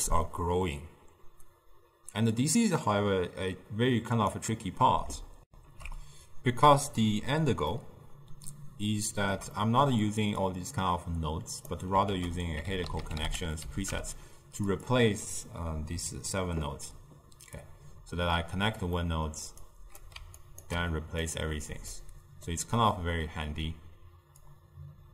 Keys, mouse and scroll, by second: 2.4-5.5 drag, 5.5 ctrl+alt+shift+w, 5.6 ctrl+alt+shift+q, 7.8-10.5 ctrl+middle drag, 10.5-12.1 drag, 12.1 ctrl+a, 17.7 click, 19.1-19.7 middle drag, 19.7 click, 20.5 ctrl+right click, 21.3-22.5 drag, 22.5-24.6 middle drag, 24.6 click.